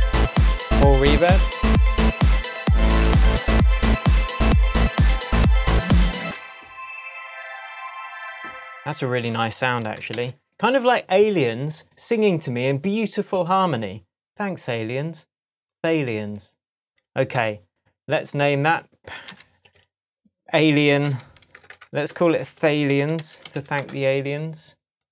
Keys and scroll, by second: 6.2 space, 10.1 shift+super+m, 17.2 shift+§, 17.3 shift+Tab, 19.3 super+r, 20.6-23.4 typing.